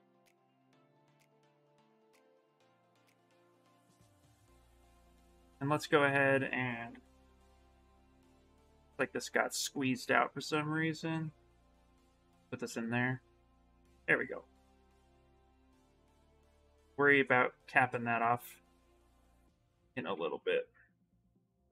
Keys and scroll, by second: 1.7 ctrl+z, 2.6 s, 4.6 q, 5.0 s, 6.7 b, 7.2 s, 18.4 s, 19.9 ctrl+z.